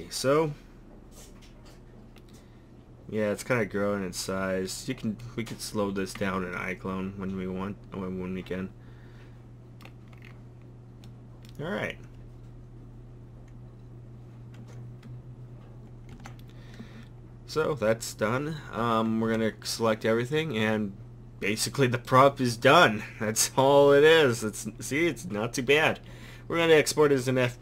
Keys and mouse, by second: 10.2-11.2 middle drag, 16.1 Escape, 18.8 a, 19.3 a.